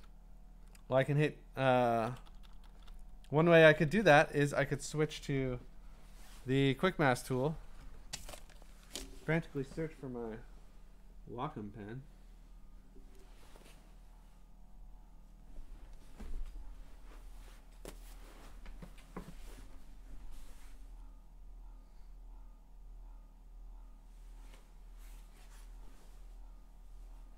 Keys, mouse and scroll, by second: 1.0 b, 2.0-3.9 typing.